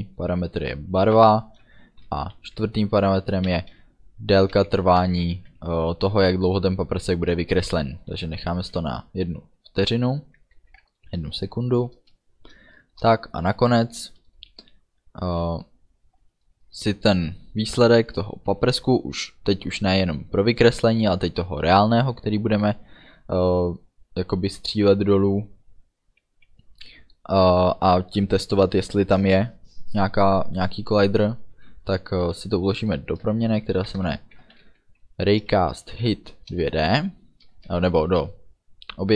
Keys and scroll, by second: 1.1 space, 3.6 1, 4.6 f, 5.0 BackSpace, 5.5 End, 8.7 ů, 10.7 ctrl+s, 13.1 Return, 18.8 Return, 33.9 shift+r, 34.4 a, 34.7 y, 35.6 Down, 36.6 Return, 37.6 space.